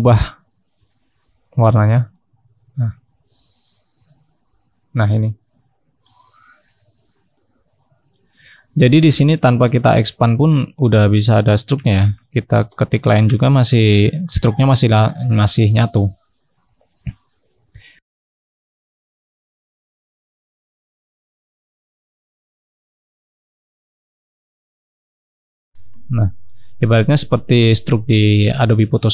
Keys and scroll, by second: 25.1-26.0 scroll up 1, 26.0-27.1 scroll down 1.